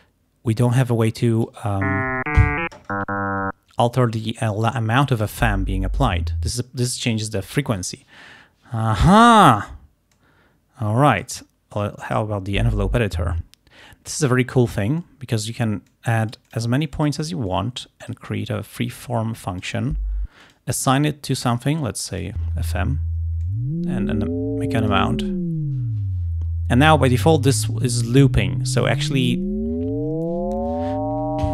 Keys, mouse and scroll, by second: 0.8 click, 4.3-5.5 drag, 10.2-11.5 drag, 11.8 click, 12.1 click, 15.1 click, 16.0 click, 16.9-18.1 drag, 19.1 click, 20.5 click, 22.2 click, 23.5-25.2 drag.